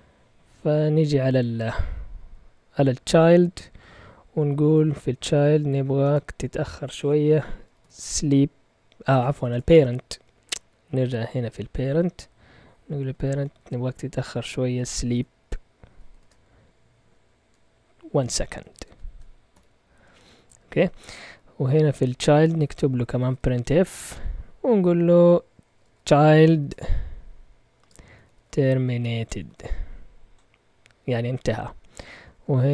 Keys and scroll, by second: 1.2 Down, 1.5 typing, 1.8 Down, 2.1 Down, 5.7 End, 6.0 Return, 7.4-10.7 typing, 10.7 Up, 11.6 Up, 12.9 Up, 12.9 End, 13.5 Return, 14.3-16.1 typing, 18.1-20.0 typing, 20.3 Down, 20.5 Down, 20.7 Down, 20.9 Down, 21.0 Down, 21.2 Down, 21.4-24.3 typing, 25.4-30.0 typing, 32.1 Up, 32.3 Up, 32.4 Up, 32.6 Up.